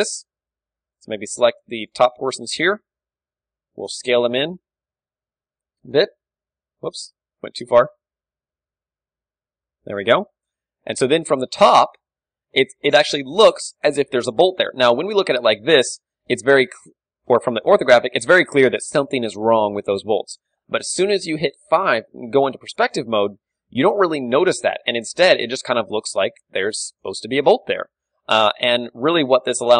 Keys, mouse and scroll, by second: 0.3-2.2 drag, 0.5 z, 0.7 a, 0.9 b, 2.2 z, 2.7 s, 6.1-7.8 drag, 6.2 Tab, 6.9 Tab, 7.5 ctrl+z, 7.8-10.0 middle drag, 8.1 ctrl+z, 8.6 s, 10.4 Tab, 10.4-12.3 drag, 11.0 KP_7, 12.3-13.5 middle drag, 12.3 a, 14.1 d, 15.1 middle click, 15.9 KP_5, 18.0 KP_5, 18.2-21.3 middle drag, 21.7 KP_5, 22.3-27.1 middle drag, 27.1-28.6 right drag, 27.9 Tab, 28.3 a, 28.6 a, 29.0 g.